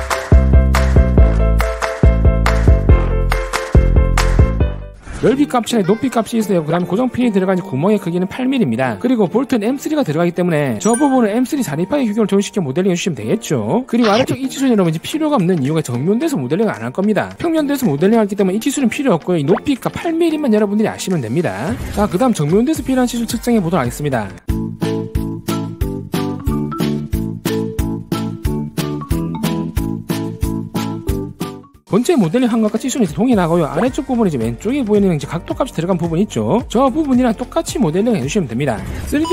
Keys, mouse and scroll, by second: 0.0 click, 0.3 click, 0.5 right click, 0.6 click, 0.9 click, 1.4 click, 1.6 click, 2.1 ctrl+z, 2.3 w, 2.4 right click, 2.5 click, 2.7 click, 3.4 click, 3.9 click, 5.1 click, 14.1 click, 14.8 click, 20.6 click, 24.6 click, 24.9 click, 25.2 right click, 25.4 click, 25.7 click, 25.9 click, 26.0 right click, 26.1 click, 26.2 click, 26.4 click, 26.5 right click, 26.7 click, 27.2 click, 27.5 click, 27.8 click, 28.1 click, 28.3 right click, 28.3 w, 28.4 click, 28.8 click, 29.0 w, 29.1 right click, 29.3 click, 29.5 click, 29.8 click, 30.0 e, 30.1 right click, 30.2 click, 30.4 click, 30.7 click, 30.9 w, 31.0 right click, 31.0 click, 31.4 click.